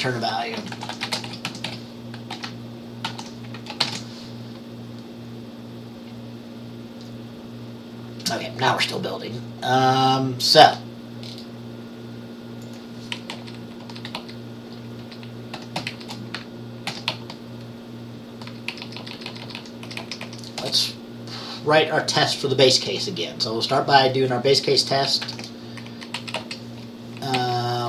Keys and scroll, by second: 0.4-2.4 typing, 3.1 ctrl+s, 3.9 ctrl+b, 13.4 Left, 13.9 Down, 14.1 Caps_Lock, 14.2 Down, 15.1 Up, 16.0 shift+Down, 17.0 ctrl+c, 17.2 Down, 17.7 Down, 19.9 Up, 20.1 Up, 20.3 Up, 20.7 Return, 25.3 Caps_Lock, 25.3 Down, 25.3 Up, 25.3 ctrl+c, 25.3 Return, 25.9 ctrl+v, 25.9 Up, 26.3 Right, 26.5 Right, 27.4 Right.